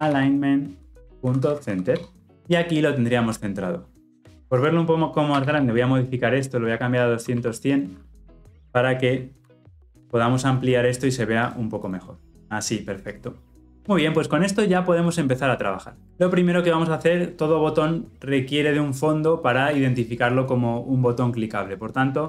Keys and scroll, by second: 11.0 ctrl+=.